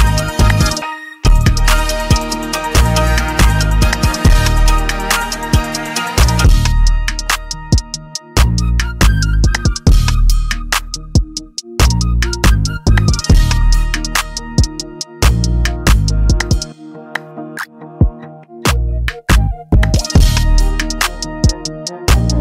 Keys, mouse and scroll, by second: 1.7 click, 1.7 scroll, 4.2 click, 5.0 middle click, 7.5 click, 8.3 middle click, 9.9 click, 11.0 middle click, 11.6 middle click, 13.1 middle click, 13.3 scroll, 14.4 scroll down 4, 15.2-15.7 scroll, 17.1 click, 17.1 scroll, 18.7 click, 19.9 click, 20.7 scroll.